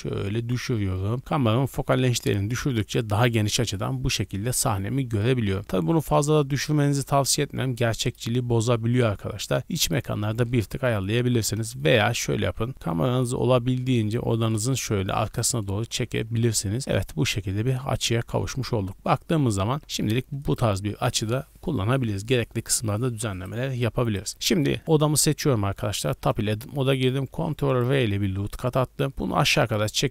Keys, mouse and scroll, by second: 5.6 z, 8.0 click, 8.9-10.6 shift+drag, 10.6 KP_7, 11.1 z, 11.5 scroll down 1, 11.8-12.4 shift+middle drag, 12.4 g, 14.7 click, 15.5 KP_0, 16.1 z, 16.5-17.2 scroll up 2, 17.6-18.0 scroll up 1, 19.7 r, 19.8 z, 20.4 click, 23.3 right click, 25.7 Tab, 27.3 ctrl+r.